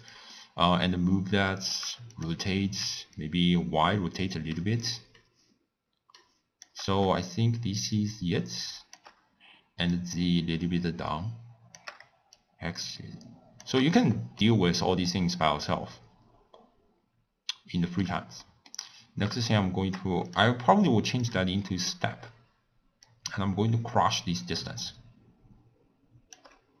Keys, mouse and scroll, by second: 3.3-6.3 shift+drag, 8.1-14.4 shift+drag, 14.4-17.4 middle drag, 21.7-26.8 drag.